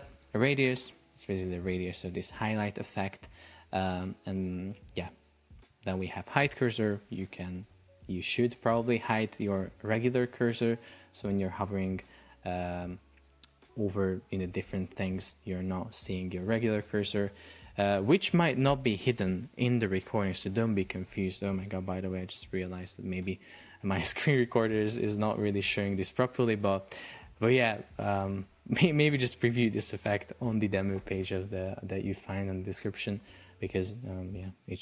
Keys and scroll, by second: 9.8 super+p, 12.0 Escape.